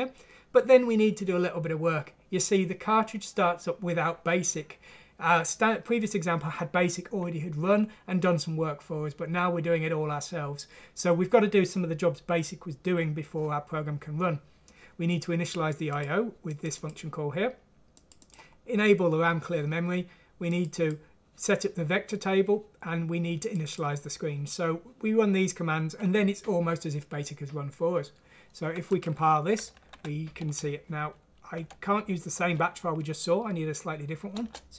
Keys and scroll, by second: 29.9 F6, 31.5 Down, 34.3 Return.